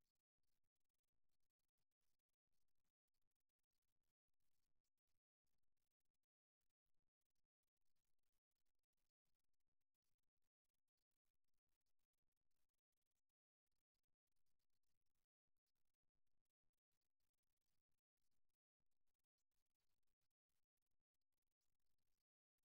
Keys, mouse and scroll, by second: 1.0-7.0 drag, 7.8-12.1 drag, 12.5-14.7 middle drag, 14.7 click, 15.3-19.7 middle drag.